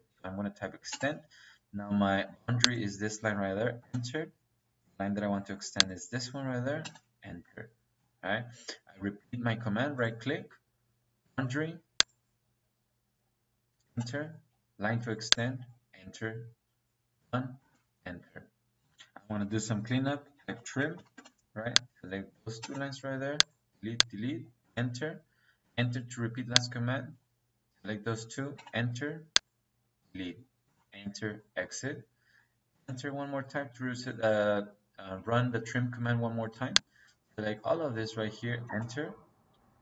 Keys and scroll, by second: 0.8 space, 3.7 -, 6.7 -, 13.7 -, 17.5 space, 19.1 Escape, 20.3 t, 20.6 r, 20.9 m, 21.1 space, 22.5 -, 24.5 Return, 25.5 space, 28.5 space, 30.5 space, 32.6 space, 38.6 space.